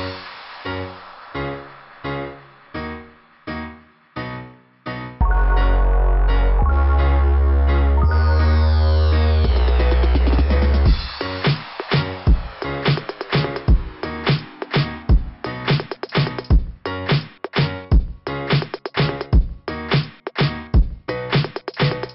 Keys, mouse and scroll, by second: 1.0 right click, 1.1 right click, 2.3 click, 3.2 right click, 3.3 right click, 5.1 click, 5.2 click, 6.5 click, 6.5 click, 7.1 click, 7.2 click, 7.3 click, 7.4 click, 8.1 scroll down 1, 9.5 click, 10.5 click, 12.7 scroll down 2, 17.9 click, 18.0 click, 18.9 click, 19.0 click, 20.2 click.